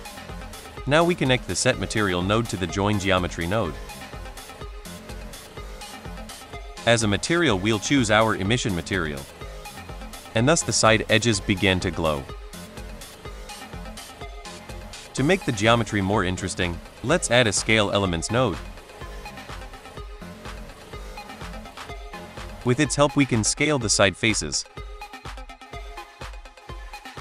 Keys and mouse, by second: 0.4 middle drag, 1.1-1.6 drag, 1.6 right click, 2.6 middle click, 2.9-3.2 drag, 3.6-4.0 drag, 4.2 click, 4.5 middle drag, 5.6 middle drag, 6.4-8.1 drag, 9.7 shift+middle drag, 10.9 shift+middle drag, 13.6 middle click, 14.0 drag, 14.4 click, 15.7 shift+a, 18.0 BackSpace, 21.9 click, 22.4 middle click, 23.1 middle click, 23.6-25.4 drag, 26.5 shift+drag.